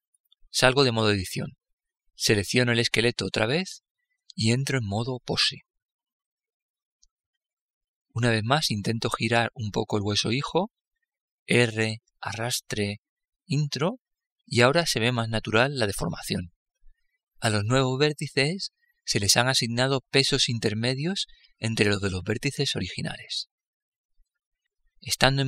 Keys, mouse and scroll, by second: 0.0-2.1 middle drag, 1.0 Tab, 2.7-4.2 right drag, 9.0 r.